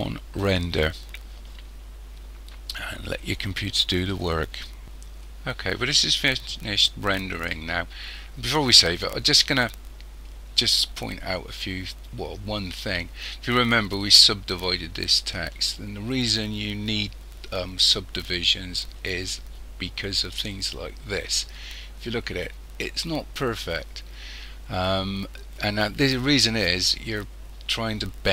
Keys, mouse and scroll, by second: 0.4 click.